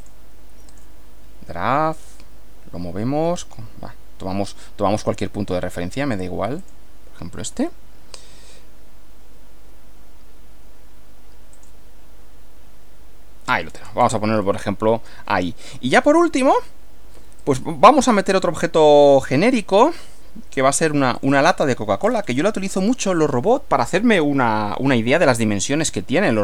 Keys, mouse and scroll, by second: 0.0 click, 0.7 click, 2.0 click, 6.6 click, 11.6 click, 13.7-14.2 scroll down 1, 14.5-15.8 middle drag, 17.4 click, 19.5 click, 20.6 click, 20.8-21.2 scroll up 1, 21.2 click, 22.0-22.6 scroll down 1.